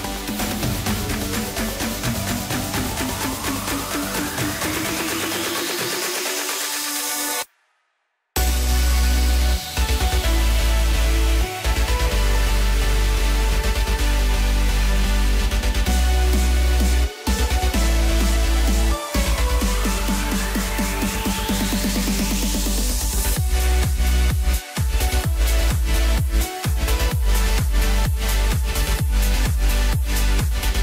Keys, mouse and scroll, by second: 0.4 2, 1.0 click, 1.8 3, 1.9 click, 2.6 x, 5.0 click, 5.2 click, 6.4-8.7 drag, 8.7 KP_1, 9.7 KP_Divide, 10.7 Tab, 12.2 click, 13.9 click, 15.3 click, 16.2 click, 16.6-17.8 drag, 19.8 click, 20.5-22.0 drag, 24.7-25.6 scroll up 1, 25.6 KP_Divide, 26.7 KP_1, 28.5 ctrl+KP_8, 29.9 scroll up 2.